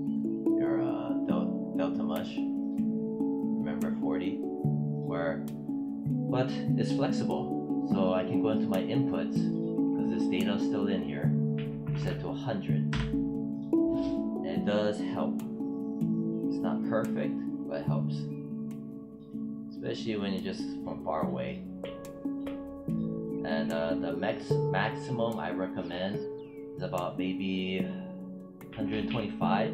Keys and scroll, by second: 11.4 1, 11.7 0, 12.8 Return.